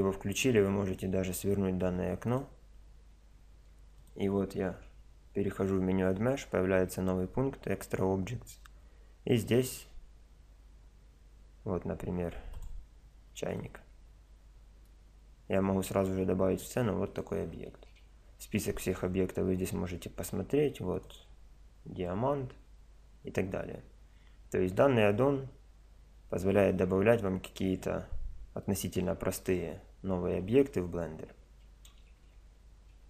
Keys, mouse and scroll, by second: 4.0-5.8 drag, 4.5 shift+a, 13.6-15.9 middle drag, 15.9 click, 16.6 middle click, 17.1-19.0 drag, 17.7 shift+a, 21.6-22.8 drag, 22.8 middle click, 23.4 click, 28.1 click, 28.6 middle click, 28.9-32.2 drag, 32.2 shift+a.